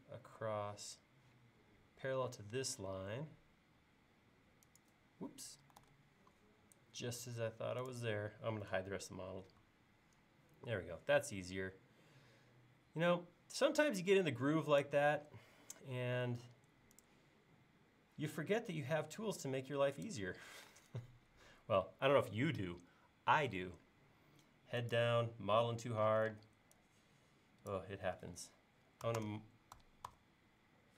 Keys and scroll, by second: 5.8 super+z, 9.7 q, 20.6 p, 23.3 l, 26.2 p, 29.1 typing, 30.6-30.9 typing.